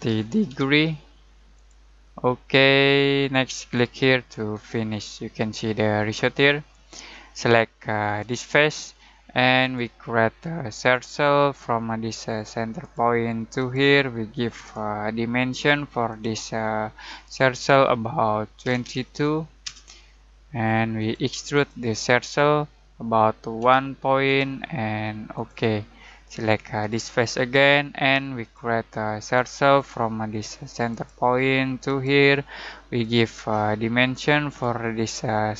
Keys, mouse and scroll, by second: 0.0-0.9 typing, 1.5-5.5 drag, 5.5-8.2 middle drag, 8.2 click, 18.6 typing, 19.6 Return, 20.9 click, 23.6 1, 24.2 click, 32.3 click.